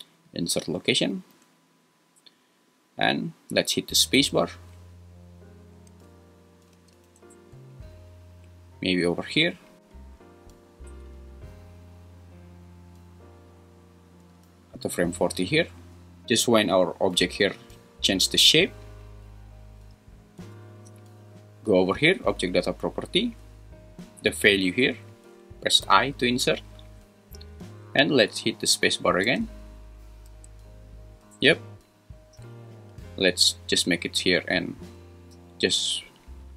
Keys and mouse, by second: 4.2 space, 5.9 space, 6.7 space, 7.1 space, 9.5-14.8 drag, 25.8 i, 29.2 space, 30.3 space, 34.0 click.